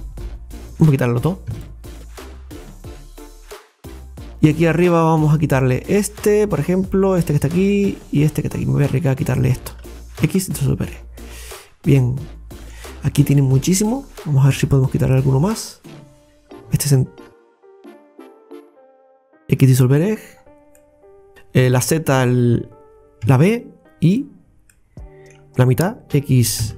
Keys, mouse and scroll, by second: 0.7 alt+shift+right click, 1.5 x, 2.1 scroll down 1, 2.7-4.0 middle drag, 4.0-4.4 scroll up 4, 5.8 alt+shift+right click, 7.1 alt+shift+right click, 9.3 alt+shift+right click, 10.2 x, 10.9-11.3 scroll down 4, 11.6-12.9 middle drag, 12.9-13.3 scroll up 4, 13.6 shift+middle click, 14.1-14.9 scroll up 2, 15.2-16.7 middle drag, 16.8 alt+shift+right click, 17.6 right click, 17.9 alt+shift+right click, 18.7 alt+shift+right click, 19.6 x, 20.1-20.5 scroll down 5, 20.8 middle click, 21.3 click, 21.6 z, 23.3 b, 24.7-26.6 middle drag, 26.6 x.